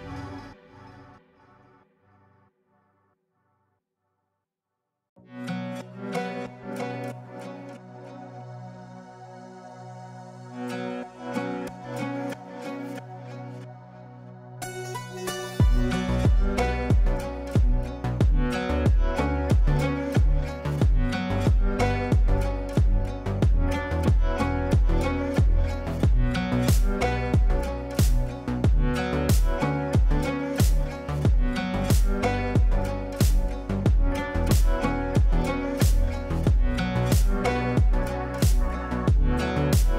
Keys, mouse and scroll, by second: 1.8 r, 2.4-6.4 drag, 6.4 shift+Page_Up, 8.0-12.2 drag, 12.2-13.6 shift+drag, 14.8 l, 15.9 shift+Page_Up, 17.2 ctrl+z, 18.0 click, 18.9 shift+Page_Up, 20.4 shift+click, 21.4 b, 23.7 click, 24.2 F3, 24.5 F2, 24.7-28.2 drag, 28.5 click, 30.0-33.4 typing, 31.4 shift+Return, 33.5 ctrl+space, 36.0 click, 36.0-39.9 drag.